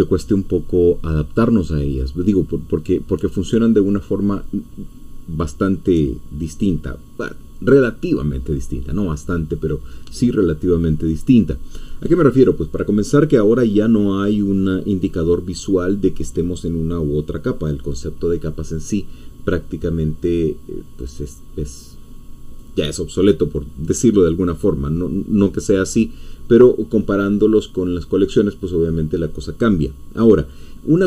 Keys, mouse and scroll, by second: 30.3-31.0 scroll up 1.